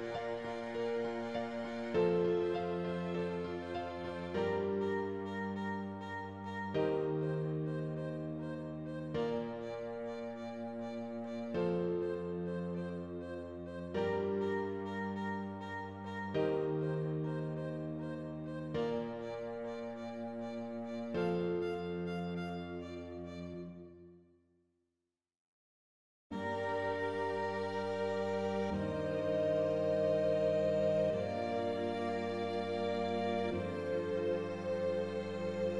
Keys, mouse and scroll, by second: 0.1-0.6 scroll down 4, 0.6 middle click, 1.4 click, 1.6 middle click, 2.0 scroll up 2, 2.4 s, 4.3 middle click, 5.1 scroll down 3, 6.0 click, 6.9 KP_0, 7.9 scroll up 1, 8.3 alt+a, 8.5 ctrl+s, 9.3 scroll up 1, 11.0 scroll up 1, 15.8-17.1 middle drag, 19.9-21.5 middle drag, 21.5 click, 21.6 scroll down 2, 21.9 middle click, 22.2-22.9 scroll up 2, 23.2 middle click, 23.8 scroll up 3, 24.1-25.4 shift+middle drag, 25.4 Tab, 25.9 click, 26.5 Left, 27.5 shift+s, 27.7 alt+a, 27.8 Tab, 28.9 shift+a, 29.3 r, 30.7 Tab, 31.3 Tab, 31.5 g, 32.8 g, 34.8 g.